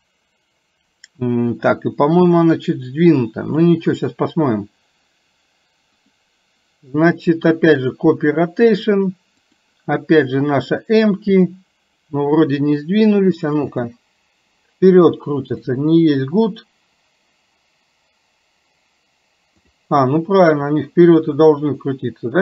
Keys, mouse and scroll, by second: 6.1-8.1 drag, 9.6 click, 13.7 space, 15.6 click, 16.2 click, 19.7 click, 20.5 click.